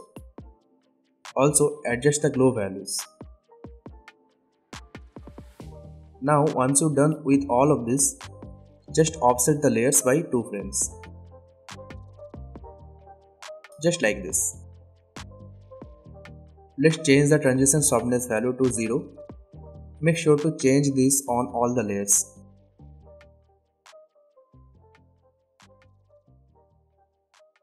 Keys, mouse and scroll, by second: 6.1 scroll up 1, 6.4 alt+scroll down 1, 7.2 click, 7.9 shift+click, 8.4-10.1 drag, 13.6-14.5 drag, 15.1 space, 16.6-17.4 drag.